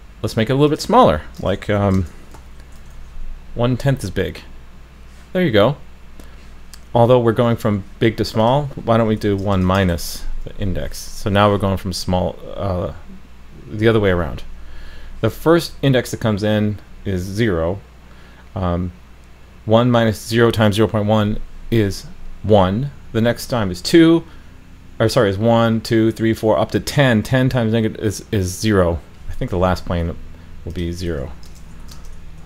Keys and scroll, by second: 2.9 super+s, 9.9 super+s.